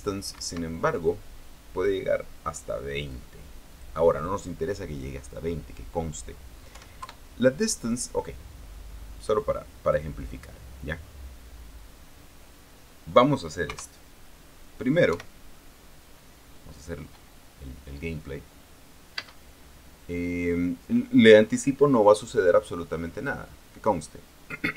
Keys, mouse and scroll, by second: 1.1 Escape, 1.8 click, 3.4 click, 4.4 click, 7.4 KP_1, 7.7 KP_Enter, 10.1 click, 14.4 KP_0, 15.8 p, 19.9 space.